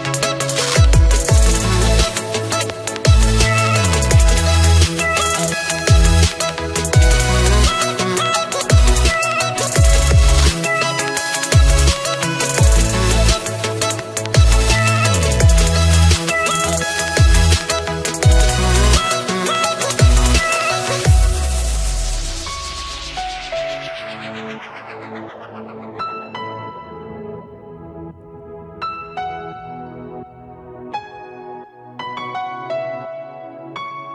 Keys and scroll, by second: 31.1 ctrl+a.